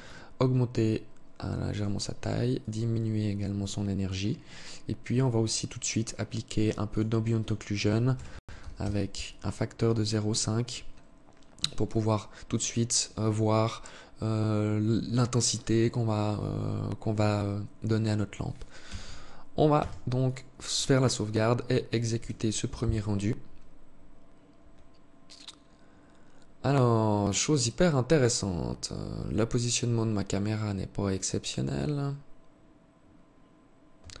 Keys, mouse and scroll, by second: 1.8 click, 4.4 click, 6.1 click, 6.6 click, 11.0 click, 18.0 t, 18.8 ctrl+s, 33.0 Escape, 33.8-34.2 scroll up 3.